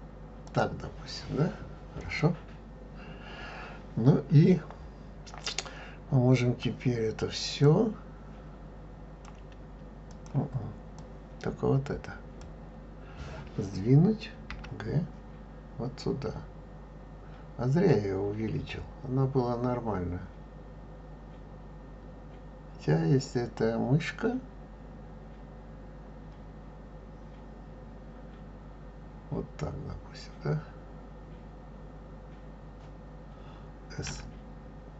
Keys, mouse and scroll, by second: 2.0 click, 7.6 click, 10.1 click, 11.0 drag, 14.5 g.